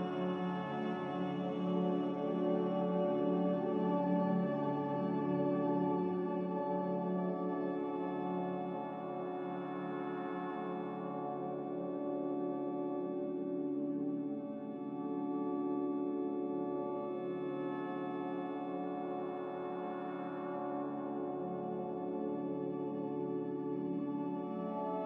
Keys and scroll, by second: 14.4 g, 18.5 z, 20.9 z.